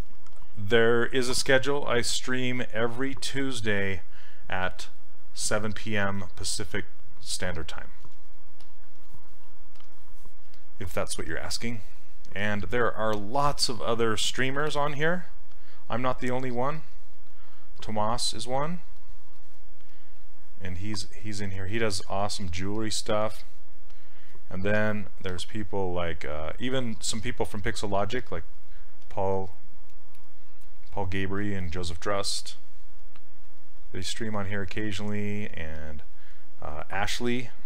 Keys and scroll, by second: 10.5 s.